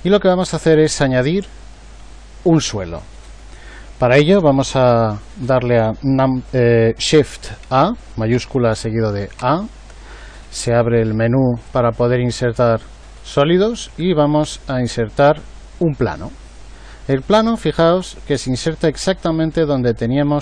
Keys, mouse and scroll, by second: 9.4 shift+a, 19.1-20.4 middle drag.